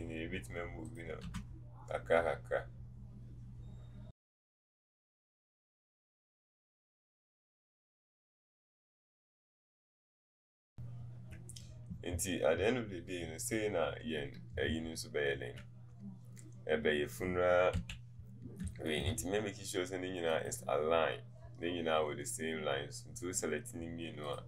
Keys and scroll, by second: 4.5 Up, 5.8 BackSpace, 7.9 BackSpace, 9.5 KP_1.